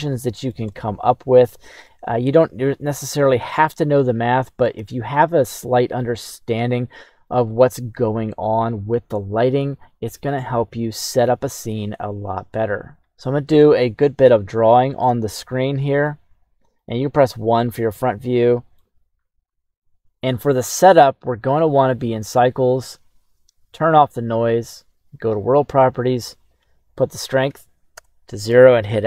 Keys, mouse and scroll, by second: 0.7-1.4 shift+middle drag, 1.8-4.6 shift+middle drag, 5.3 middle click, 6.5-7.2 shift+middle drag, 13.8-14.2 scroll down 1, 14.2-14.9 shift+middle drag, 15.5 KP_1, 15.9-16.7 middle drag, 17.0 KP_1, 17.5-18.7 middle drag, 21.7 click, 23.7 click, 25.0 click, 26.4-28.0 drag.